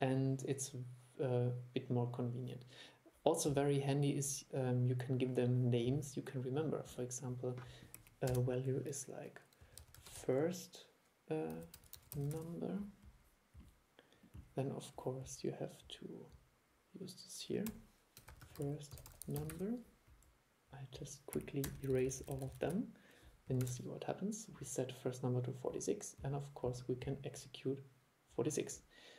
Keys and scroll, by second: 23.7 super+e.